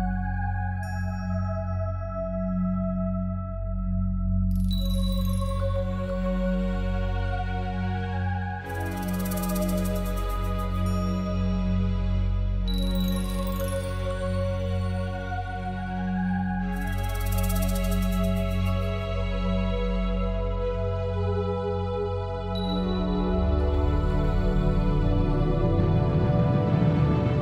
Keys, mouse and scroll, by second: 0.3 middle click, 1.3 click, 1.7 alt+shift+click, 1.9 alt+shift+click, 2.4 middle click, 3.0 z, 3.2 middle click, 5.4-5.8 scroll down 4, 5.8 shift+middle click, 6.2 scroll down 2, 6.4 middle click, 7.0 scroll up 4, 7.4 middle click, 10.3 alt+shift+click, 10.7 middle click, 11.9 z, 12.0 middle click, 13.4 w, 15.5 middle click, 16.5 middle click, 17.2 Tab, 17.4 middle click, 18.3 scroll down 4, 18.9 ctrl+r, 19.5-20.2 scroll down 2, 20.2 ctrl+z, 20.4 Tab, 21.0 ctrl+r, 26.7 Tab, 26.8 middle click.